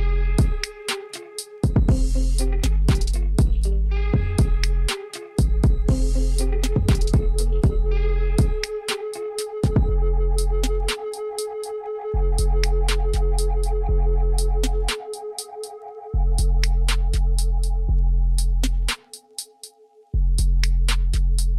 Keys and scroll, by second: 1.7 1, 3.4 shift+z, 7.6 shift+z, 8.2 Tab, 10.8 ctrl+2, 17.8 Tab.